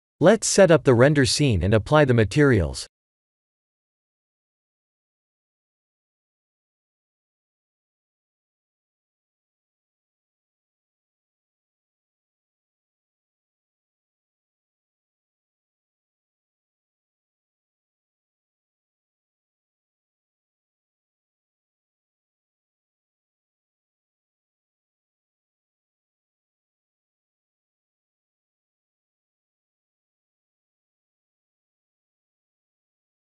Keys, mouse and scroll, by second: 0.0 shift+middle click, 0.7 middle click, 1.1 middle click, 1.2 middle click, 1.2 shift+middle click, 2.2 ctrl+alt+KP_0, 2.8 shift+`, 6.7 scroll up 1, 7.7 click, 7.7-8.5 scroll up 2, 8.5 shift+z, 9.1 click, 10.3 click, 11.7 click, 13.2 click, 17.3 click, 19.2 click, 20.2 click, 21.1 shift+click, 22.9 shift+click, 25.1 click, 27.4 click, 28.2 click, 28.8 shift+click, 29.3 shift+click, 30.3 click, 31.6 click, 31.8 shift+click.